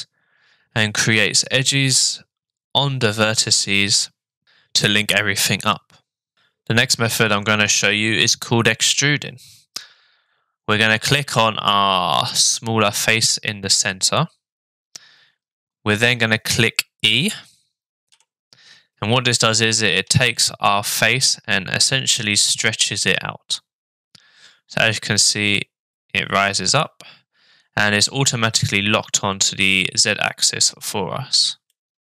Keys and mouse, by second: 12.2 click, 18.1 e, 31.6-32.1 middle drag.